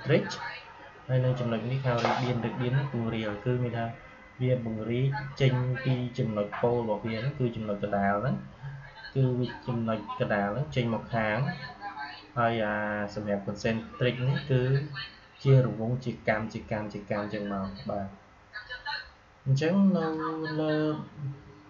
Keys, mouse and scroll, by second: 19.9 click.